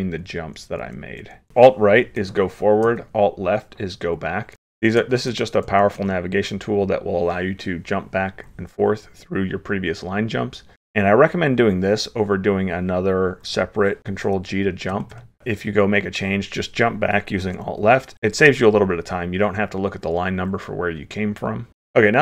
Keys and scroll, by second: 0.1 alt+Left, 0.5 alt+Right, 0.9 alt+Left, 1.5 alt+Right, 2.9 alt+Left, 4.5 alt+Left, 4.6 alt+Right, 5.3 alt+Right, 5.7 alt+Left, 6.0 alt+Right, 14.0 ctrl+g, 17.5 alt+Left, 21.7 ctrl+/, 21.7 ctrl+s.